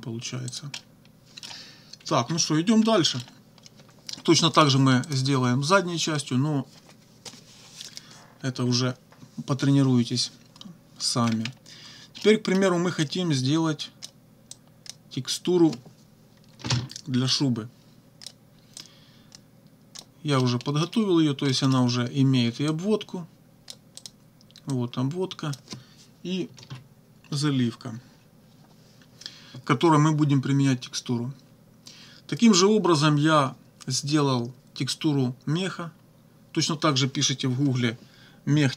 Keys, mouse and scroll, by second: 0.5-1.7 drag, 0.8 right click, 2.1 -, 2.9 click, 4.6 click, 5.1 click, 11.3-11.6 scroll down 1, 12.2 click, 13.1-14.2 drag, 14.5 click, 16.6 ctrl+z, 17.3-18.5 drag, 18.8-20.1 drag, 20.4 middle click, 21.5 middle click, 22.7-23.9 drag, 24.0 click, 24.7 click, 26.6 ctrl+z.